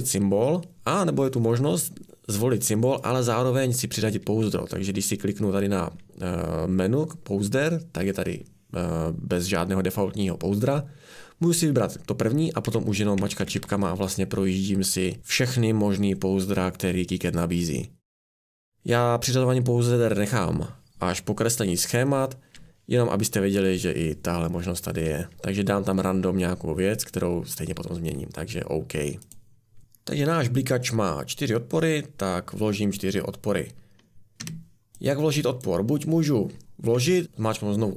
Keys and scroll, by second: 12.7 Down, 13.2 Down, 13.4 Down, 13.6 Down, 13.7-18.3 Down, 23.1-23.9 Up, 34.4 Escape, 37.2 a.